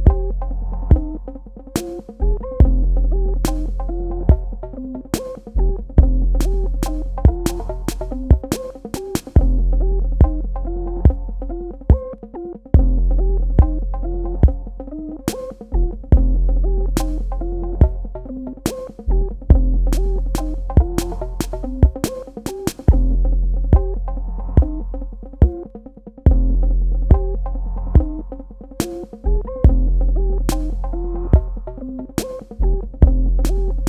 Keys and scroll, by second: 1.4 v, 5.8-7.4 typing, 22.3 space, 28.9 z, 32.3 KP_2, 32.5 KP_0, 32.7 KP_Enter.